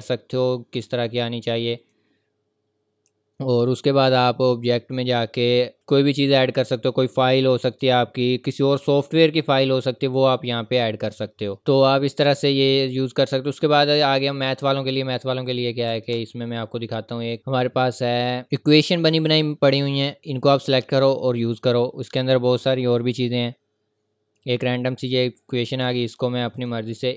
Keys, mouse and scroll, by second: 0.6-1.3 scroll down 1, 1.8 click, 5.8 scroll down 1, 5.9-8.2 scroll up 1, 9.3-11.6 scroll down 1, 11.6-11.9 scroll up 1, 14.1 scroll up 1, 14.2 scroll down 1, 15.6 click, 15.9 Return, 17.3 click, 19.4-21.3 scroll down 1, 23.6 scroll up 1, 24.4 click.